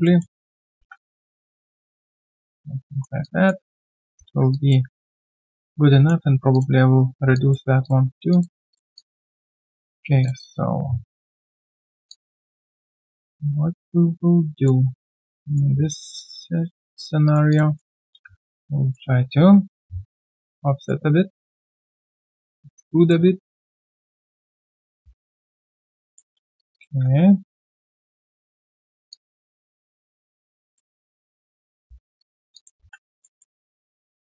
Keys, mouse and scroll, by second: 0.0 alt+middle click, 0.4 alt+click, 0.5-1.3 typing, 3.2 alt+click, 4.4 typing, 4.5 alt+click, 7.3 alt+click, 9.8 alt+right click, 12.0 q, 12.1 alt+click, 15.2 alt+right click, 16.0 Tab, 17.2 alt+right click, 17.5 alt+click, 17.7 alt+middle click, 18.4 shift+right click, 21.9 w, 22.2 shift+click, 23.7 alt+right click, 24.4 alt+middle click, 24.7 alt+right click, 25.4 right click, 26.6 shift+click, 26.6-27.5 typing, 26.7 shift+double click, 29.1 alt+click, 29.9 right click, 30.9 Tab, 31.8 Tab, 32.5 alt+click, 32.7 typing, 33.2 alt+middle click, 33.6 shift+right click.